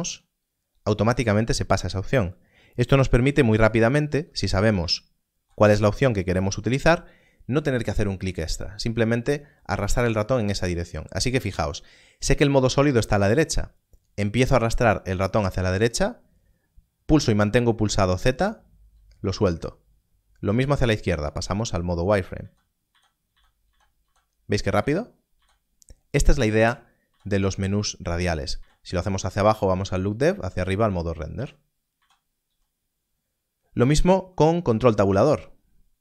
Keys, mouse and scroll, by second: 0.1 z, 3.2 z, 4.7 z, 17.0 z, 20.9 z, 22.3-25.3 typing, 26.5 z, 27.0 z, 28.5 z, 29.7 z, 30.7 z, 31.3 z, 31.9 z, 32.5 z, 34.7 ctrl+1, 34.8 ctrl+Tab, 34.9 ctrl+Tab.